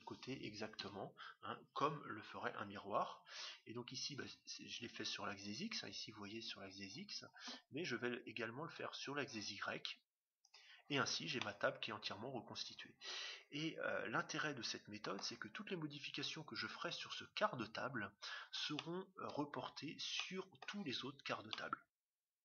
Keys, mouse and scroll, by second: 10.4-12.1 drag, 11.3-13.1 middle drag, 18.7-22.4 middle drag.